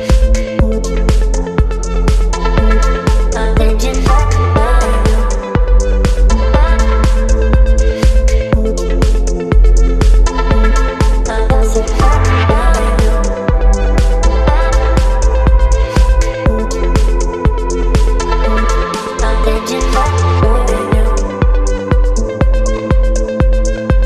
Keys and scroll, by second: 1.0 Return, 3.1 space, 10.3 space, 19.9 ctrl+BackSpace, 21.3 ctrl+d, 21.8 space.